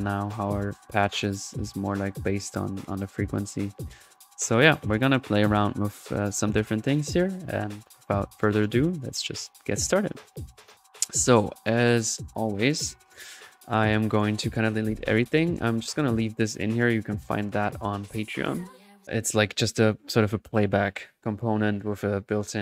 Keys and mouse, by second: 0.6-4.6 drag, 4.6 middle click, 5.4 click, 7.7 click, 8.1-8.6 middle drag, 10.7 drag, 13.9-15.0 right drag, 15.9 Delete, 16.2 middle click, 19.3 middle click, 19.7 drag.